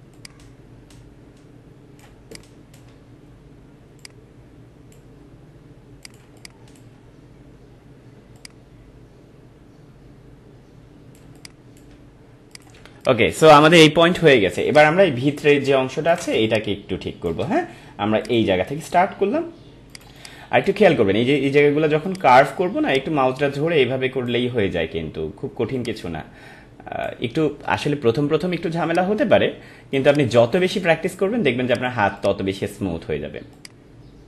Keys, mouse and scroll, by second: 0.1-2.0 drag, 2.0 space, 2.3 click, 2.5 space, 4.0-6.0 drag, 6.2 space, 6.4 click, 7.0 space, 8.3-11.2 drag, 11.2 space, 11.3 click, 11.7 space, 12.5 click, 12.8 space, 13.0 click, 13.3 space, 14.6-16.3 ctrl+drag, 16.3 space, 16.4 click, 16.8 space, 18.2 click, 20.0 space, 20.1 click, 22.0-30.0 drag, 30.0 space, 30.1 click, 31.7 click, 32.0 space, 32.1-34.2 drag.